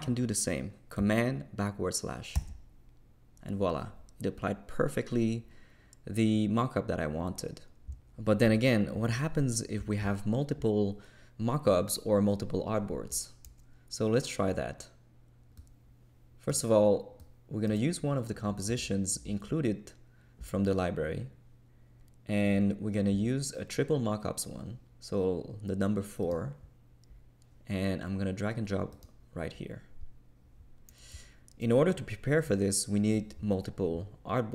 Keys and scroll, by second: 2.3 super+\.